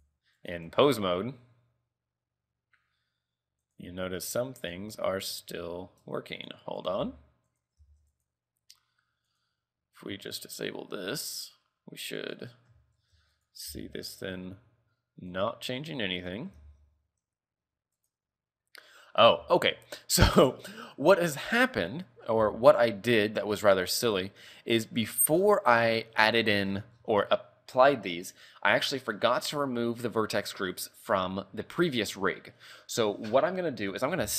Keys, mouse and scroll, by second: 0.5 right click, 0.8 r, 4.7 click, 5.5 click, 6.3 Tab, 6.5 right click, 6.9 right click, 7.2 Tab, 7.6 right click, 8.0 ctrl+Tab, 8.2 right click, 9.4 click, 10.4 click, 11.5 click, 12.3 right click, 13.1 ctrl+Tab, 13.5 right click, 13.8 r, 15.9 right click, 16.3 right click, 16.9 ctrl+Tab, 18.3 right click, 19.2 scroll up 4, 19.7 shift+middle click, 20.1 scroll down 3, 21.0 middle click, 22.1 middle click, 22.6 shift+middle click, 23.0 middle click, 24.0 click, 25.1-25.9 scroll down 12, 26.0-28.0 scroll up 25.